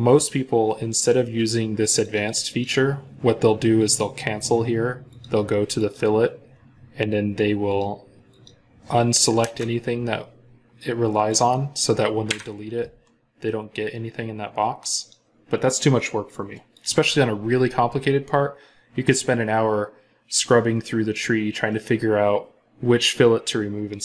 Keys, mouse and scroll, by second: 2.3 double click, 9.2 Return, 12.1 Delete.